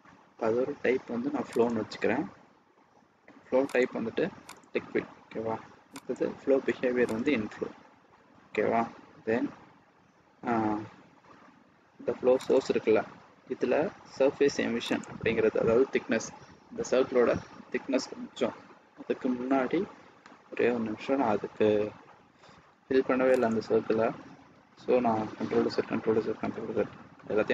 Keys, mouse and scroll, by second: 3.6 click, 6.0 click, 8.4 scroll down 1, 9.0 scroll down 1, 9.4 scroll up 1, 11.7 scroll down 1, 12.5 click, 13.6-14.8 scroll down 1, 15.5 click, 24.0 ctrl+z, 24.3 ctrl+z, 24.6 ctrl+z, 25.6 ctrl+z, 26.5 ctrl+z, 27.1 middle click.